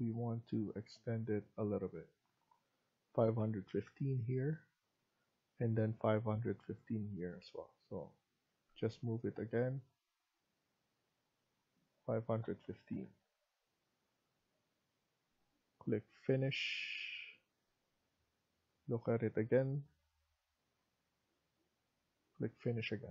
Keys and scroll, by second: 3.6-4.3 typing, 12.6-13.8 typing, 13.6 Escape, 13.8 Escape.